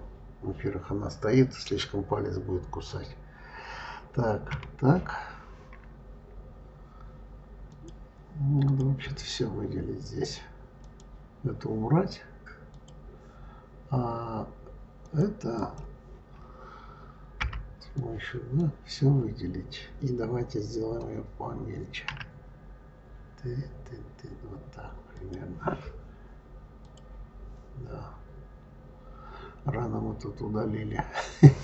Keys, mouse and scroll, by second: 4.3 KP_3, 7.5 click, 8.5 click, 10.6 click, 12.5 click, 14.9 click, 17.2 b, 22.0 s, 26.7 click, 28.2-28.7 scroll up 3.